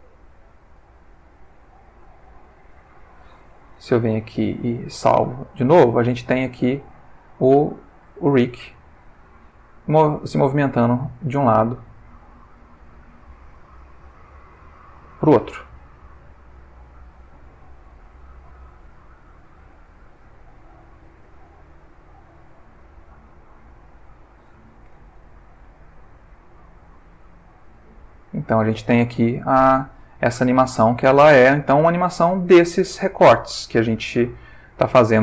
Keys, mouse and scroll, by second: 2.3 click, 4.1 i, 4.5 click, 5.3-12.3 drag, 13.2 click, 14.0 r, 14.8 click, 15.5 click, 15.8 r, 16.7 click, 17.5 click, 18.2 r, 19.4 click, 20.5-23.8 drag, 24.8 i, 25.2 click, 26.1-32.2 drag, 33.5-35.2 drag.